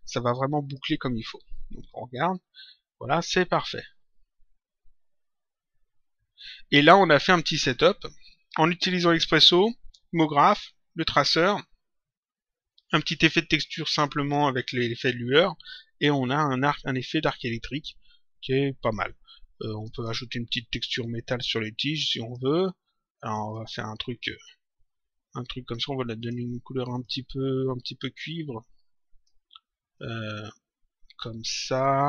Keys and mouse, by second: 0.6 click, 1.7 click, 12.9 click, 16.5 click, 19.7 click, 21.0 click, 23.2 click, 26.1 click, 28.1 click, 29.9 click.